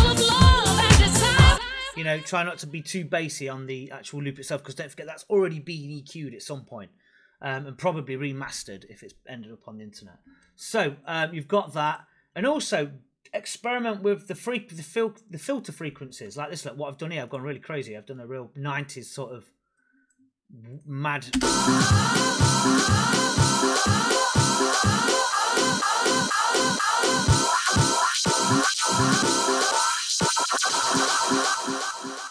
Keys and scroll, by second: 1.4 space, 21.2 space.